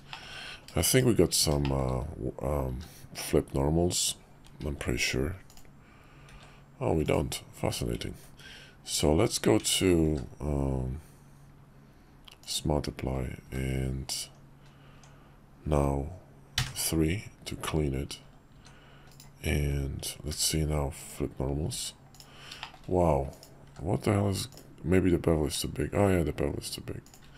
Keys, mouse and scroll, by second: 0.1 shift+click, 0.9 /, 1.6 shift+drag, 2.7 q, 4.6 alt+v, 7.6 q, 8.9 Tab, 10.1 q, 13.5 q, 14.9 Tab, 16.6 3, 17.5 Tab, 18.5 s, 20.3 alt+v, 22.6 shift+middle drag, 23.6 q, 27.2 q.